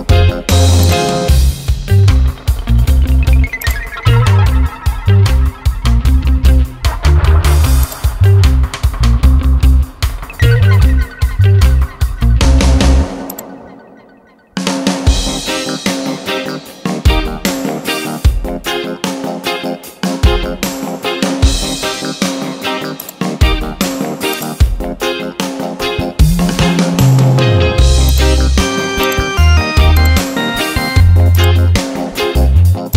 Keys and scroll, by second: 2.0 ctrl+j, 9.8 ctrl+t, 18.3 Return.